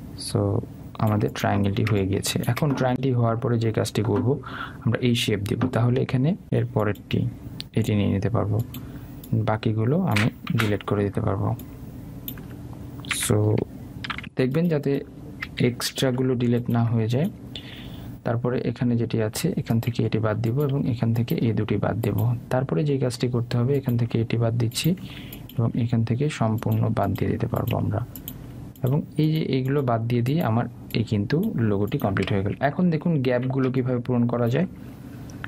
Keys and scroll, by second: 11.6 Delete, 17.0 Delete.